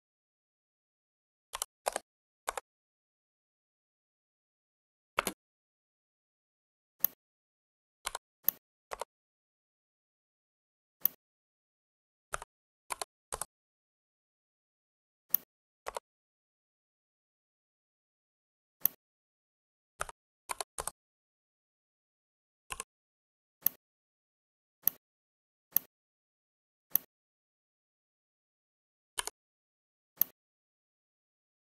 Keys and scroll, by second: 1.4-1.8 typing, 2.3 Return, 5.1 space, 12.3 /, 12.8 3, 13.2 Return, 19.9 /, 20.4 3, 20.6 Return.